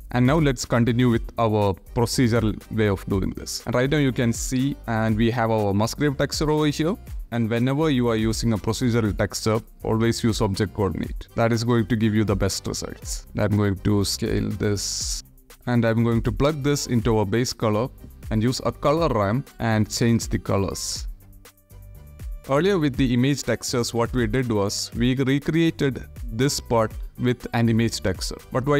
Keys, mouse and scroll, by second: 0.2 click, 1.4 click, 2.2 middle click, 2.8 middle click, 3.2 click, 4.8 ctrl+z, 7.0 ctrl+1, 8.6-9.7 drag, 12.1 click, 12.9 ctrl+z, 13.2-15.1 drag, 15.1 ctrl+z, 15.4 click, 15.7-16.6 drag, 17.2 shift+a, 19.9 ctrl+c, 20.5 click, 20.9 ctrl+v, 21.1 click, 22.1 click, 22.3-23.0 drag, 23.5 g, 24.2 click, 24.4-25.8 drag, 26.3 click, 27.8 click.